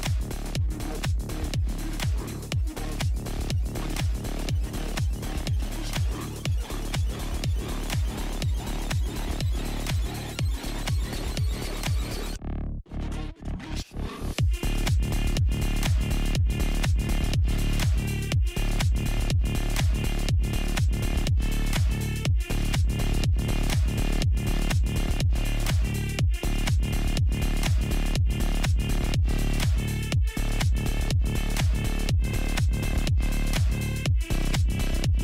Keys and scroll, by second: 4.5 alt+i, 5.4 alt+space, 12.0 super+z.